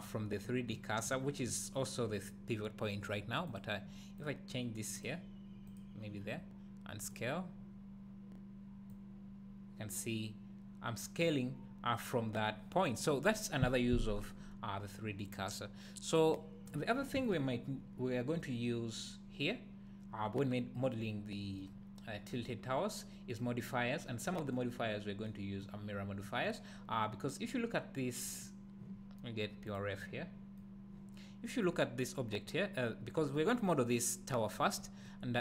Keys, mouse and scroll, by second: 0.7-4.2 drag, 5.0 click, 5.7 click, 7.0-16.4 drag, 16.6 click, 17.1 x, 21.6-26.6 middle drag, 22.5-23.3 scroll up 2, 23.8-24.2 scroll down 2, 24.8-25.2 scroll up 2, 25.9-26.2 scroll down 2, 28.2 click.